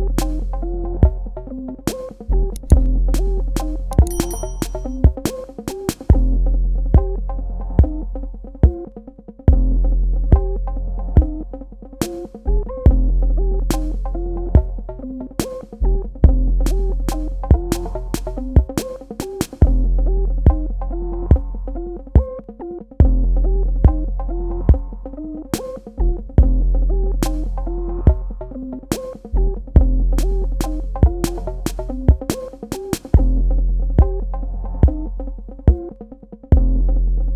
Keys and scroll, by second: 8.0 space, 11.0 space, 15.6 space, 23.8 space, 37.0 space.